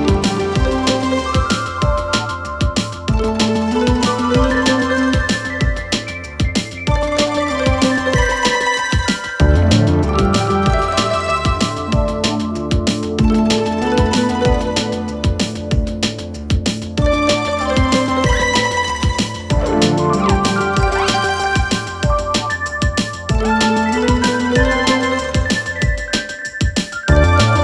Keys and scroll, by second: 9.4 4, 13.3 2, 15.7 ctrl+d, 15.9 Escape, 16.8 Escape, 17.7 ], 18.3 4, 23.9 ctrl+F1.